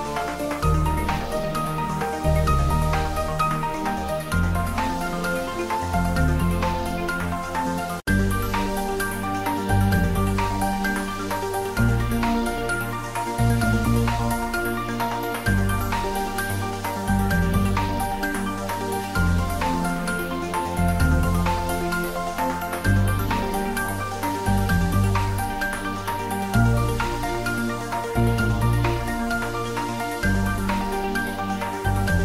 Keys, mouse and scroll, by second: 0.9 click, 2.5 shift+z, 2.8 shift+middle click, 3.6-5.3 ctrl+middle drag, 5.3 click, 5.9-6.9 typing, 7.2 ctrl+middle click, 7.8 shift+middle click, 8.5 s, 8.9 click, 9.3 g, 10.0 click, 10.7 r, 11.5 click, 12.1 shift+d, 12.7 r, 14.5 click, 15.7-16.6 typing, 17.8 Down, 18.4 click, 19.7 ctrl+z, 19.9 shift+click, 20.8 g, 21.8 click, 22.3 ctrl+s, 23.9 click, 24.2 ctrl+s, 26.7 ctrl+s, 26.8 ctrl+middle click, 27.3 ctrl+s, 28.8 ctrl+middle click.